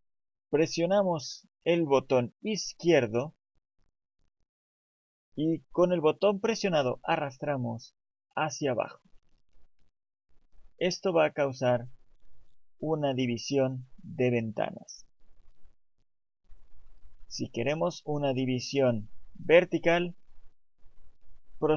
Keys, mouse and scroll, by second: 4.3 click.